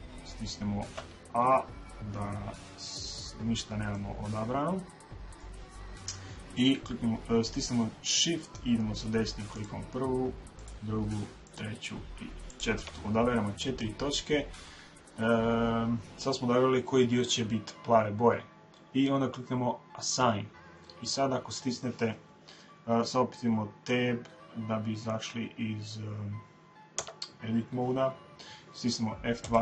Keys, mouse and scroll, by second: 0.9 a, 3.9-8.3 middle drag, 9.5-16.4 right drag, 19.9 click, 26.9 Tab, 28.0-29.6 middle drag.